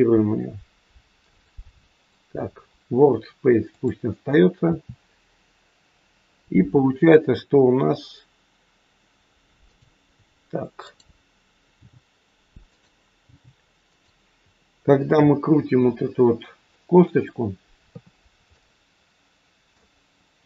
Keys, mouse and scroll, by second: 1.2 click, 3.6 click, 4.6 r, 10.9 click, 11.6 g, 12.6 click, 13.2 g, 14.7-15.7 scroll up 3, 15.7 shift+middle click, 16.6 middle click, 17.9 KP_3, 18.5 middle click.